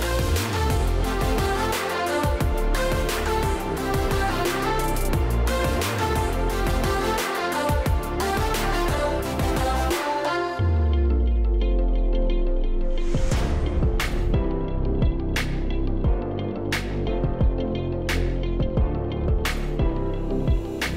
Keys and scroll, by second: 16.4 BackSpace.